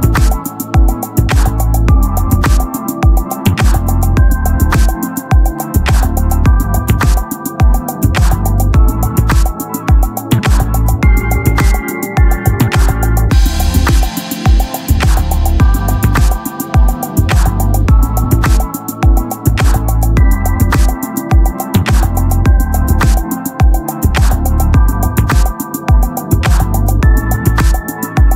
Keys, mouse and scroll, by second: 1.0-2.1 right drag, 2.1 KP_1, 5.7 KP_3, 6.8-8.0 drag, 8.3-11.2 right drag, 11.7 middle click, 13.8 click, 13.8 s, 14.9 KP_3, 15.7-17.8 drag, 17.4 s, 18.3-19.6 drag, 19.6-20.9 middle drag, 20.9 s, 23.0-24.8 drag, 24.0 KP_3, 24.8 s, 26.6 Tab, 27.0 Tab, 27.5 Tab.